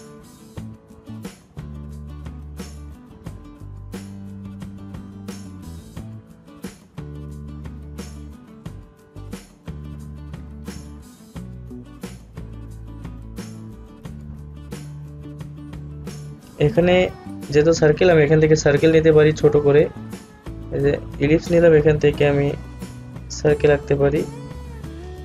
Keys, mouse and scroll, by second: 2.8 ctrl+z, 6.5-10.3 drag, 11.2 alt+scroll up 1, 13.5-15.8 drag, 15.8 alt+scroll down 1, 16.6 alt+scroll up 1, 18.7-23.3 drag, 23.3-25.2 drag.